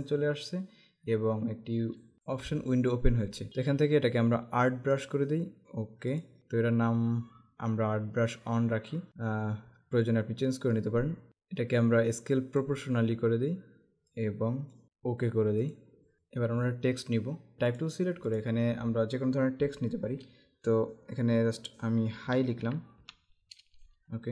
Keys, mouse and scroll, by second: 5.1 click, 11.3 click, 14.2 click, 15.8 click, 17.9 click, 22.3-23.5 typing.